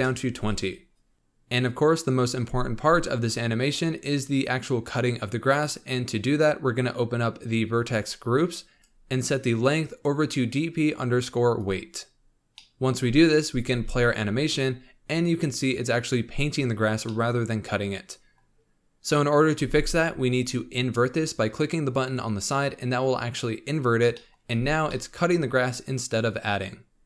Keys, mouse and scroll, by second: 1.1 middle click, 4.2-5.6 scroll down 2, 7.9-8.3 drag, 8.3-8.8 scroll down 5, 8.8 drag, 9.6-12.5 drag, 12.5-13.6 middle drag, 13.6 space, 16.9 scroll down 1, 17.1-19.7 middle drag, 19.7 space, 22.2-24.1 drag, 24.1 middle click, 24.4 space, 25.0-27.0 middle drag.